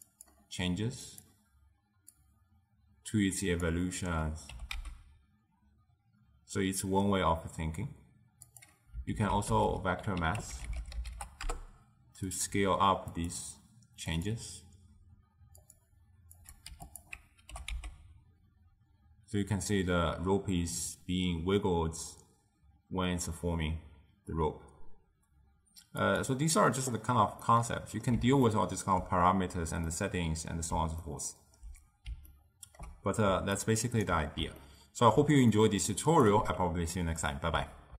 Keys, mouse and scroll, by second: 0.2 click, 2.3-4.6 drag, 4.6 g, 9.2 ctrl+a, 13.2-17.2 drag, 17.6 g, 27.5-33.4 middle drag, 33.4 d, 33.6 right click, 34.1 d, 34.7-36.2 ctrl+middle drag, 36.2 click.